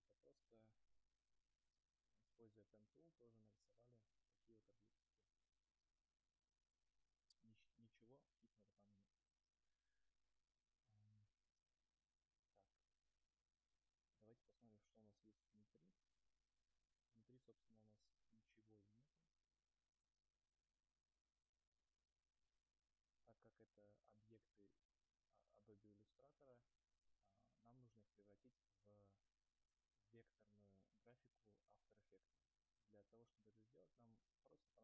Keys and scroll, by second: 1.3 ctrl+z, 2.1 ctrl+z.